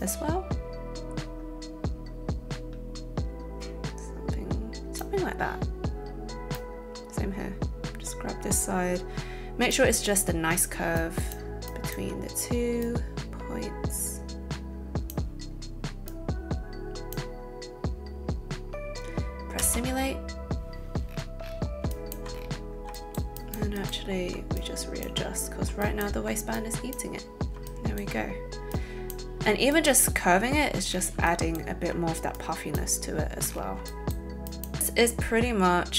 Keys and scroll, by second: 19.6 space, 21.8 t.